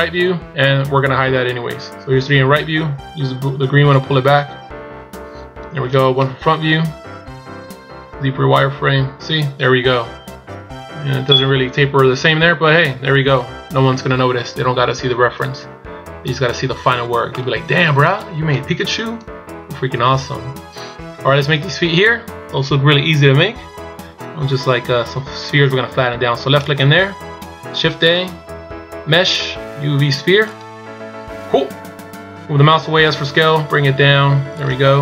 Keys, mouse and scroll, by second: 4.0 click, 6.2 KP_1, 7.8 z, 10.2 scroll up 3, 12.7-13.5 scroll down 2, 13.5 scroll down 1, 15.1-15.8 scroll down 1, 17.3 scroll down 2, 17.4 middle click, 18.5 KP_1, 19.5-19.8 shift+scroll down 1, 19.8-20.3 scroll up 3, 21.7 scroll up 2, 26.7 click, 27.6 shift+a.